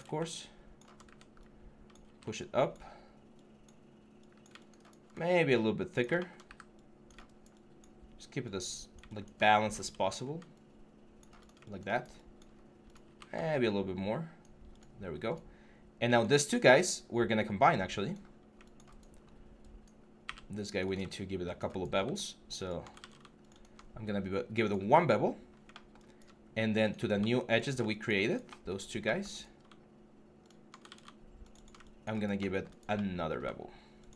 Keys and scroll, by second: 0.9 w, 6.3 w, 22.8 ctrl+z, 30.7 ctrl+z.